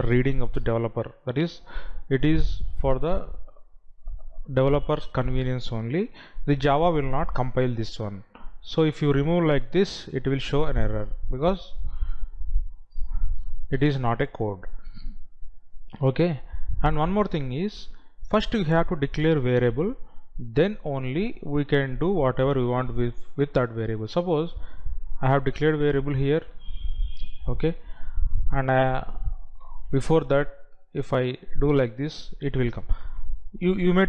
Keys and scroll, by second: 10.2 Delete, 26.9 ctrl+x, 29.9 ctrl+v.